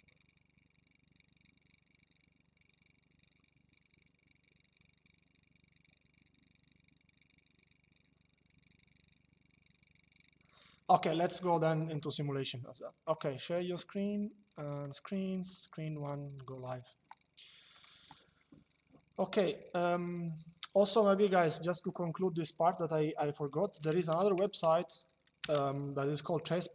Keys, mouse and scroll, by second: 12.7 click, 14.5 click, 16.4 click, 17.5 click, 20.9 click, 25.1 KP_Enter.